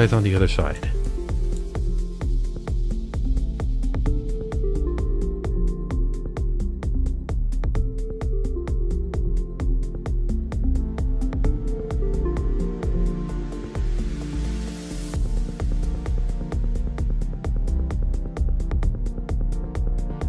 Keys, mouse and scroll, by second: 1.1 click, 1.6 f, 2.1 click, 2.3 f, 2.4 click, 2.5 click, 2.7 click, 2.9 middle click, 3.2 click, 3.3 click, 3.4 click, 3.8 shift+click, 4.2 scroll down 1, 4.2 middle click, 4.3 scroll up 2, 4.6 click, 5.2 middle click, 5.3 ctrl+z, 5.3 click, 5.5 shift+click, 5.9 click, 6.0 middle click, 6.1 click, 6.5 shift+click, 6.9 shift+click, 7.1 click, 7.3 click, 7.4 middle click, 7.7 shift+click, 8.0 click, 8.2 scroll up 1, 8.2 click, 8.6 z, 8.7 middle click, 8.8 z, 8.9 middle click, 9.0 z, 9.4 shift+click, 9.8 shift+click, 10.0 click, 10.2 click, 10.5 middle click, 10.5 shift+c, 10.5 click, 10.8 i, 10.9 click, 11.2 click, 11.4 click, 11.6 click, 11.9 middle click, 12.6 shift+click, 12.8 shift+click, 13.0 click, 13.5 shift+click, 13.6 shift+c, 13.7 click, 13.9 click, 14.1 middle click, 14.5 i, 14.6 click, 15.0 middle click, 15.1 shift+click, 15.5 shift+click, 15.8 middle click, 15.9 scroll up 1, 16.3 click, 16.6 shift+click, 16.9 scroll down 1, 17.0 middle click, 17.0 scroll up 1, 17.1 click, 17.5 shift+click, 17.7-19.6 typing, 17.7 click, 17.9 click, 18.2 click, 18.6 shift+click, 19.0 click, 19.3 click, 19.4 middle click, 19.7 click, 20.2 middle click.